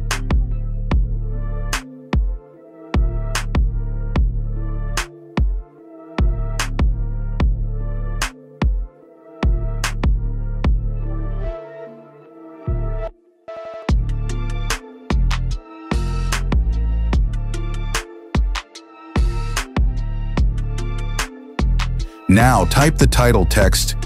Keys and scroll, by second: 10.5 space.